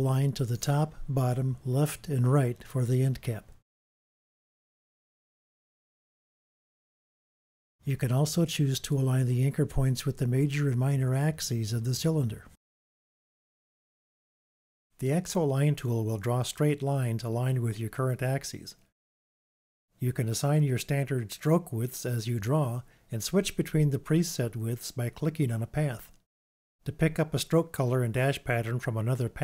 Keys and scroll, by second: 11.1 super+d.